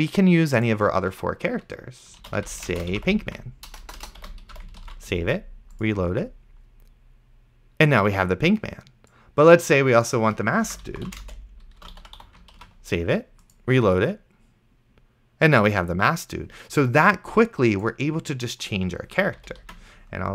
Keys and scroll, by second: 2.2-5.1 typing, 10.7-12.7 typing, 12.9 ctrl+s, 19.9 ctrl+s.